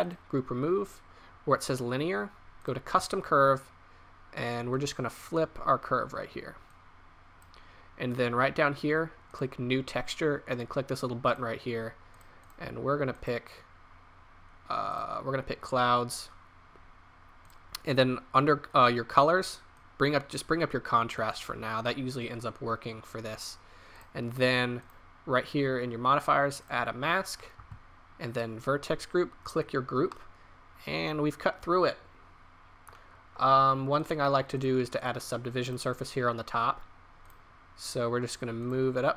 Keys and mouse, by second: 4.7-8.8 drag, 9.2-14.8 drag, 17.4 click, 19.8-20.8 drag, 24.2-26.7 drag, 30.2-31.1 middle drag, 31.3-31.8 middle drag, 32.8 middle click, 34.0-38.2 drag, 38.6-39.1 drag.